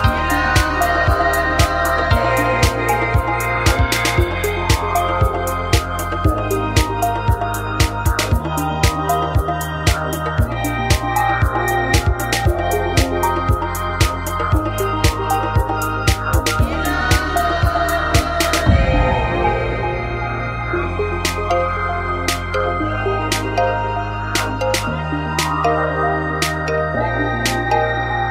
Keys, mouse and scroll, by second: 1.0 w, 2.3-4.0 right drag, 2.8 g, 5.2 click, 5.2 right click, 5.9 w, 6.7-8.1 right drag, 7.6 w, 8.8-10.4 right drag, 9.8-11.7 drag, 12.0-14.0 right drag, 13.5 w, 14.3 right click, 15.0 g, 17.1 click, 17.7 a, 18.0-19.2 right drag, 18.9 f, 19.0 a, 20.2 f, 20.3 a, 22.4 w, 23.5 right click, 23.9 click, 25.1-26.1 right drag, 25.8 w, 26.8-27.8 drag, 26.8-27.8 right drag.